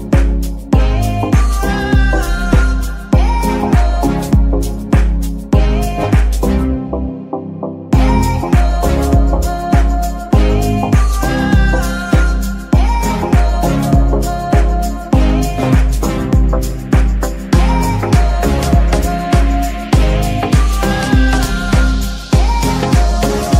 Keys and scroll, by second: 2.0 g, 2.8 Escape, 5.9 z, 11.9 z, 12.7 g, 13.5 Escape, 14.2 g, 14.7 Escape, 15.7 r, 16.0 x, 16.7 Escape, 19.9-20.7 typing, 23.2 Escape.